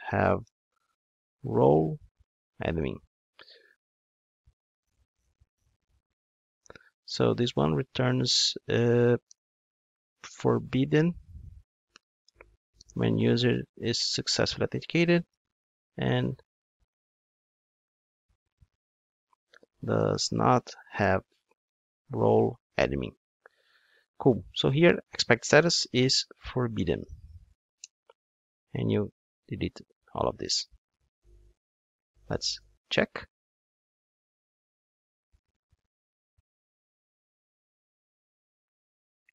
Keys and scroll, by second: 12.2 alt+shift+Right, 27.8 Return, 28.6 Return, 28.7 super+x, 32.6 ctrl+shift+d.